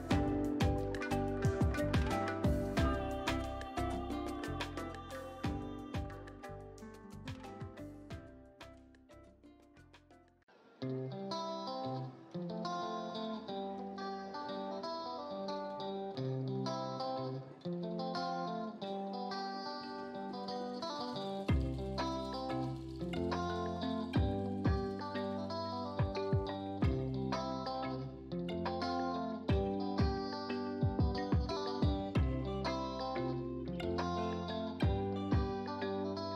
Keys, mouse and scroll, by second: 3.9-6.8 alt+drag, 7.6 click, 10.4-14.8 drag.